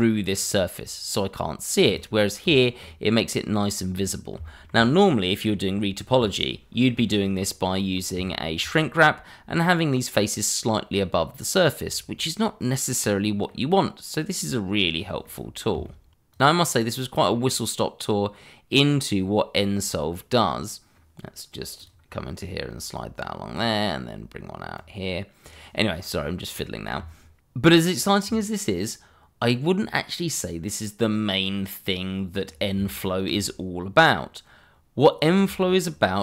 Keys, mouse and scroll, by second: 1.8 click, 2.8 middle click, 4.0-4.3 scroll down 1, 4.5 shift+middle click, 7.3 middle click, 8.2 shift+middle click, 8.3 middle click, 8.4 shift+middle click, 8.9 scroll up 1, 11.8 scroll down 1, 12.2 middle click, 14.4 middle click, 14.9-15.2 scroll up 1, 15.2 middle click, 16.0 shift+middle click, 16.4 scroll down 1, 16.6 middle click, 18.1 click, 19.4 click, 21.8 click, 29.0-29.6 scroll down 1, 29.6 middle click, 30.0 scroll down 1, 30.2 middle click, 32.9 shift+middle click.